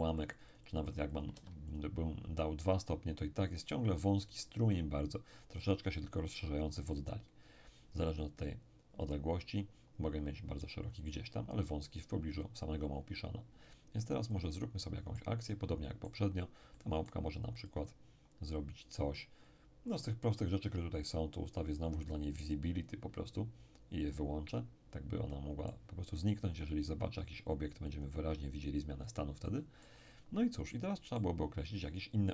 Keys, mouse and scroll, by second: 1.3 2, 14.3-18.7 drag, 14.8-18.7 middle drag, 22.8 click, 24.0-26.7 drag, 24.5-26.7 middle drag, 27.2 click, 28.7-29.4 scroll down 2, 29.4 middle click, 30.1-30.7 scroll up 2, 30.7-32.1 middle drag.